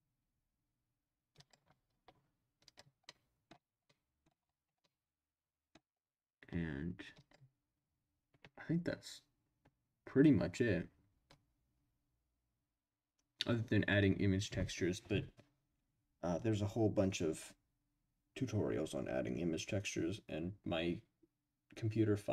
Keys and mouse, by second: 1.4 click, 2.6 click, 3.0-3.5 middle drag, 3.8-4.2 middle drag, 4.8-5.8 middle drag, 7.1 click.